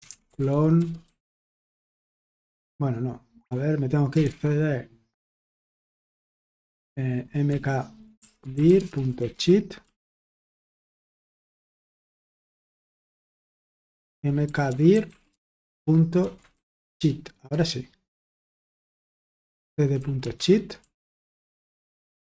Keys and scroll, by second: 0.0-5.5 typing, 6.2 Return, 7.2-10.5 typing, 13.8-17.4 typing, 17.4 Return, 19.2-22.2 typing.